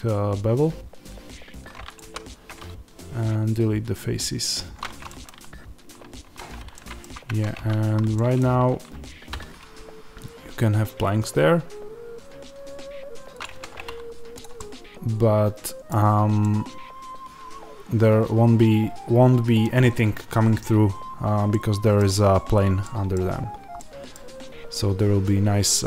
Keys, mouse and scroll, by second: 1.9-5.0 drag, 5.0-13.3 middle drag, 6.1 Tab, 7.2 Tab, 7.7 a, 8.5-9.2 scroll up 1, 9.2 e, 13.3 click, 13.4 Tab, 13.7-14.3 scroll down 1, 14.3 click, 14.5-25.8 middle drag, 15.9 scroll down 1, 20.8 scroll up 1, 23.2-23.7 scroll down 2.